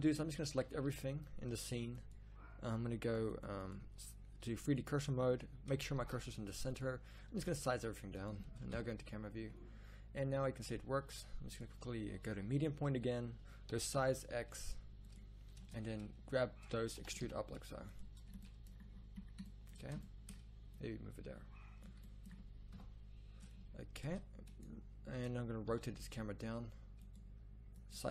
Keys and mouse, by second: 0.6 a, 0.9 a, 1.9 drag, 6.0 shift+s, 7.3 s, 8.7 KP_0, 11.5-11.8 drag, 13.7 s, 15.6 Tab, 17.0 e, 22.7 KP_0, 24.0 Tab, 25.7 r.